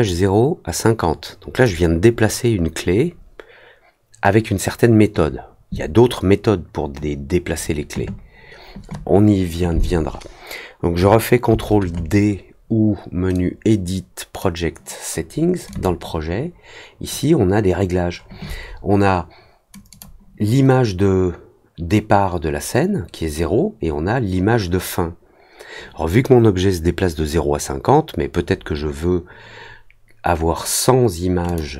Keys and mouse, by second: 0.0-1.6 drag, 13.3-14.3 drag, 15.7 click, 19.8 click, 31.4 click.